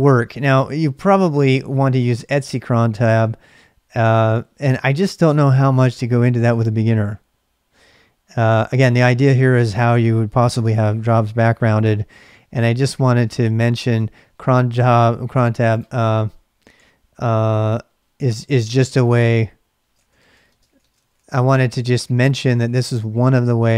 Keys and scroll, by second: 17.6 ctrl+[, 17.7-23.7 typing.